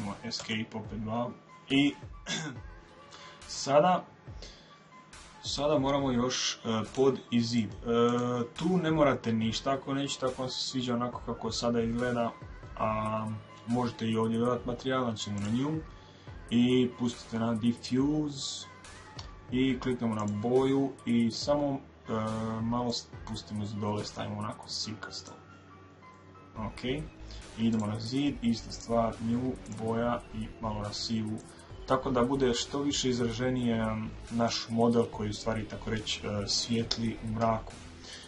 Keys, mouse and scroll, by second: 0.0 Escape, 6.4-9.4 drag.